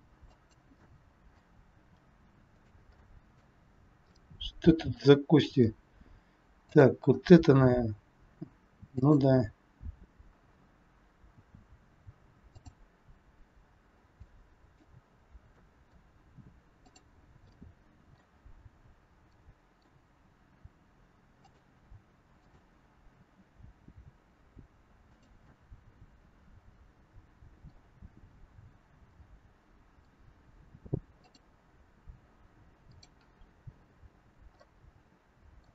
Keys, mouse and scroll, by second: 0.7 middle click, 1.7 r, 2.9 middle click, 4.0 middle click, 6.6 click, 7.5 r, 9.4-10.5 scroll down 3, 10.5-11.3 scroll up 2, 11.3 r, 14.1 middle click, 15.5 middle click, 16.7 click, 17.5 middle click, 18.5 scroll down 1, 19.4 middle click, 20.0 r, 22.2 click, 23.1 r, 25.4 middle click, 29.0 middle click, 34.5 middle click.